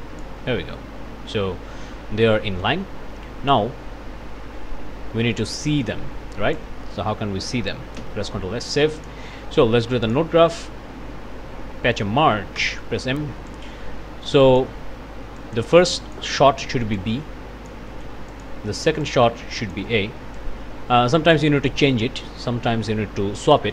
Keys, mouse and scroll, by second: 0.5-1.9 scroll down 1, 2.2 click, 3.5-6.8 drag, 8.0 ctrl+s, 9.0 click, 9.5 click, 10.0 click, 10.4 click, 12.6 m, 13.5-14.8 drag, 15.4 click, 15.9 click, 17.0 click, 18.3 click, 19.0 click, 20.3-21.5 drag, 23.6 click.